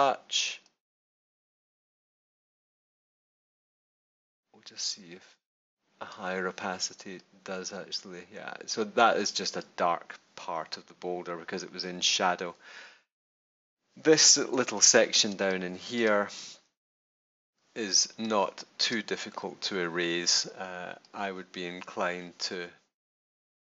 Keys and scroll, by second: 14.4 super+-, 15.2 super+space, 15.8 space, 16.9 super+=, 18.0 super+space, 18.5 space.